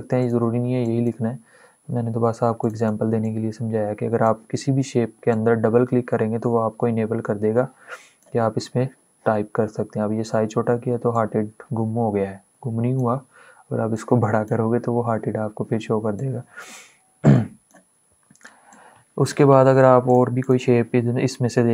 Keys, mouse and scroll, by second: 11.1-19.7 drag.